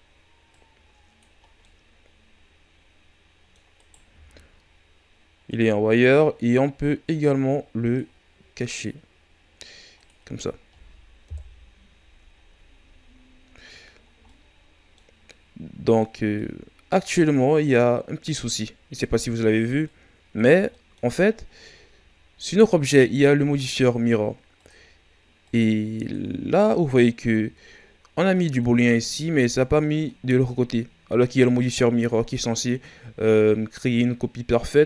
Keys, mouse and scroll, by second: 0.5 click, 1.4 scroll down 1, 1.6-3.7 middle drag, 3.7-5.4 right drag, 5.4-8.9 drag, 8.9-9.9 scroll down 5, 9.9-10.4 drag, 10.4 scroll down 2, 11.2 KP_1, 12.4-13.5 ctrl+scroll down 6, 13.5-14.0 scroll up 1, 14.0 scroll down 1, 14.2-18.4 middle drag, 18.4-20.7 drag, 20.7-21.3 middle drag, 21.3-22.8 scroll up 1, 22.8 right click, 24.5-28.3 drag, 28.3-34.8 middle drag.